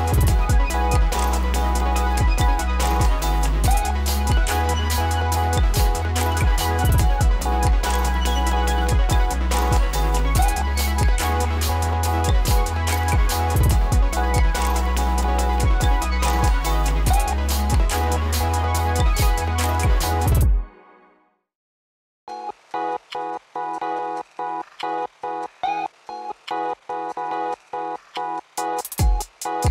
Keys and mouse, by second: 8.2 ctrl+d, 9.0-10.8 drag, 14.5 ctrl+d, 15.2-23.1 drag, 25.3-26.5 typing, 26.1 click, 29.0 click, 29.4 space.